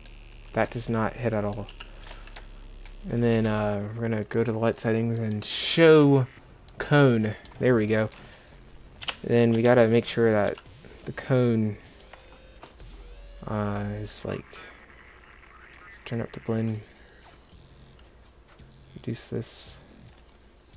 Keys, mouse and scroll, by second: 1.7 g, 9.0 KP_Decimal, 9.6 KP_0, 10.5 g.